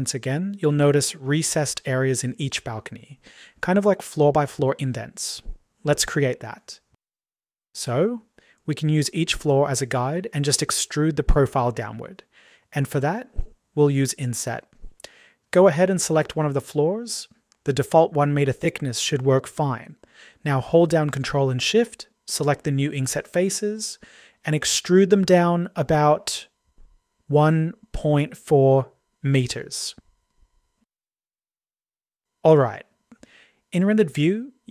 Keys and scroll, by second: 31.5 [.